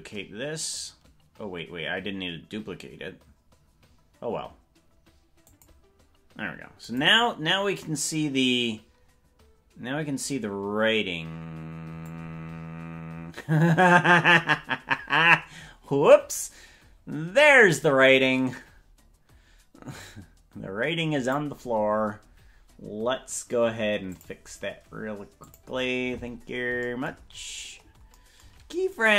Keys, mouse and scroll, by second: 6.9 click, 7.2-10.3 drag, 12.1-21.4 drag, 24.1 click, 25.4 click, 27.3-28.1 scroll down 17, 28.9 right click.